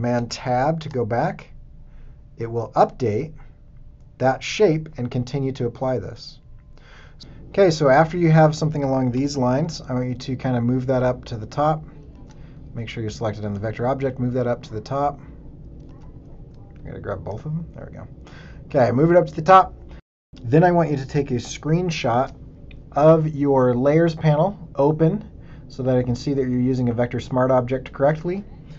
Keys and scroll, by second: 0.1 super+Tab, 9.2 v, 12.1 super+z, 15.9 super+z, 16.5 shift+super+z, 20.3 super+d, 22.1 ctrl+shift+super+4.